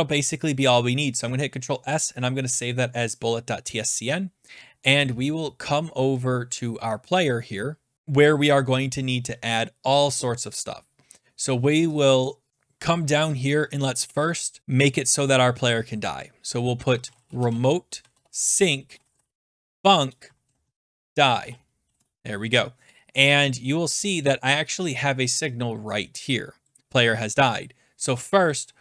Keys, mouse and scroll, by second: 2.0 click, 3.1 middle click, 3.8 middle click, 3.8 middle click, 4.2 scroll, 7.4-8.6 scroll, 7.9 click, 8.9-10.6 scroll, 12.0 click, 12.5 click, 12.7 scroll down 3, 13.2 click, 14.0 Return, 16.7-22.3 typing, 23.1-23.7 scroll down 9, 24.9 scroll, 26.6 click, 26.8-28.0 scroll, 28.1 click.